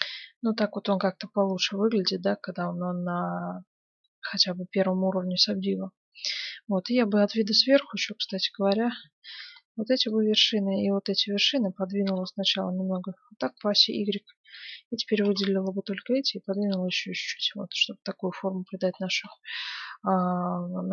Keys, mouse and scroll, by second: 4.3 Tab, 5.3-7.4 middle drag, 6.9 KP_7, 8.0 z, 9.0 a, 9.3 b, 10.6 b, 11.9 g, 13.7 a, 13.9 b, 15.0 g, 16.7 Tab, 17.2 z, 17.7-18.9 middle drag, 19.3 middle click, 20.3 middle click.